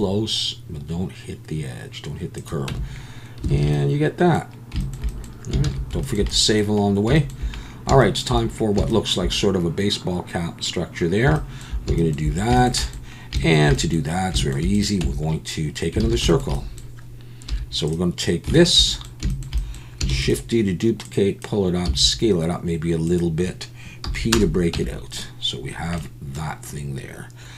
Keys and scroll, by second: 2.7 Tab, 3.5 alt+a, 5.6 ctrl+s, 15.0 Tab, 16.0 alt+a, 17.5 3, 20.1 shift+d, 21.9 s, 24.0 p, 24.7 Tab.